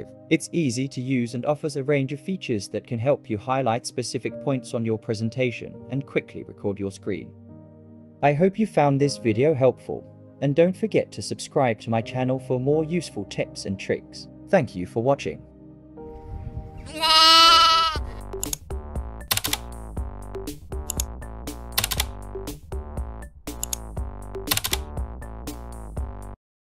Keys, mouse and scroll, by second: 0.0-1.1 typing, 5.3 right click, 10.1 right click.